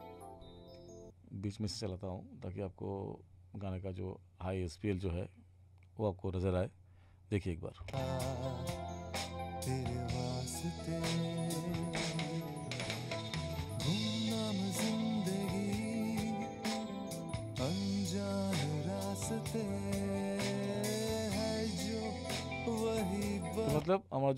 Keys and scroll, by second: 1.1 space, 7.8 space, 12.0 ctrl+=, 23.7 space.